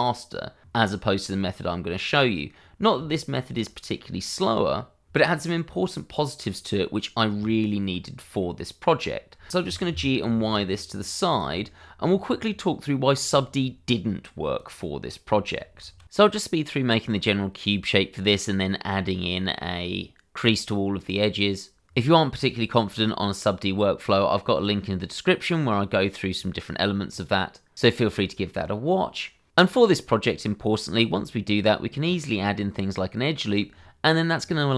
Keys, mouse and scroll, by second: 2.1 middle click, 3.1 shift+middle click, 3.6-3.9 scroll up 1, 3.9 middle click, 6.0-6.4 scroll down 1, 6.4-7.3 scroll up 1, 7.3 Tab, 8.4 middle click, 9.2 scroll down 1, 9.4 shift+middle click, 9.9 y, 11.3 click, 11.6 shift+middle click, 12.1 middle click, 14.6 click, 15.3 shift+middle click, 16.1 shift+a, 16.4 click, 17.2 g, 17.7 click, 17.8 s, 18.5 click, 18.8 s, 19.5 shift+y, 20.2 click, 20.4 middle click, 21.0 s, 21.2 x, 21.9 click, 22.0 middle click, 22.3 ctrl+a, 22.6 click, 22.7 shift+middle click, 23.7 click, 23.9 scroll up 1, 24.2 Tab, 26.0 a, 26.2 middle click, 26.5 shift+e, 26.7 click, 26.9 Tab, 27.8 ctrl+3, 28.3 click, 28.9 middle click, 29.4 Tab, 30.0 click, 30.2 scroll up 1, 30.3 shift+z, 30.4 click, 30.9 g, 31.8 click, 32.3 g, 33.1 click, 33.5 ctrl+r.